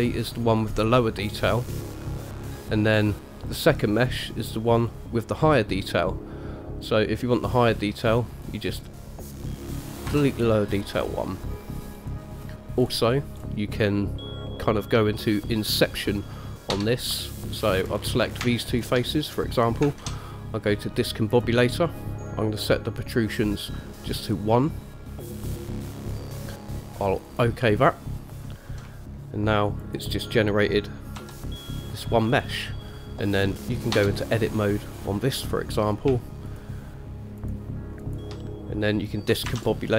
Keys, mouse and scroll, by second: 3.1 click, 3.7 click, 5.0-6.4 middle drag, 8.5 click, 9.0 click, 10.3 Delete, 11.2-11.6 middle drag, 12.1 click, 13.0-13.6 scroll down 2, 13.6 scroll up 2, 16.9 Tab, 18.1 click, 18.9 shift+click, 20.2 shift+a, 29.0-29.5 middle drag, 30.0 click, 31.4 g, 34.1 Tab, 34.9 click, 35.6 middle click, 36.7 shift+click, 37.6 click, 38.2 click, 39.8 shift+a.